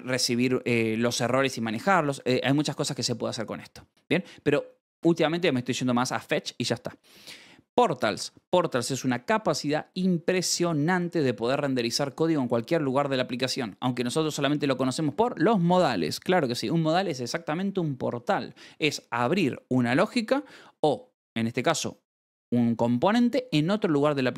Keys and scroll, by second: 2.1-3.0 typing, 7.7 shift+v, 8.1 Escape, 14.4 shift+v, 14.8 Escape.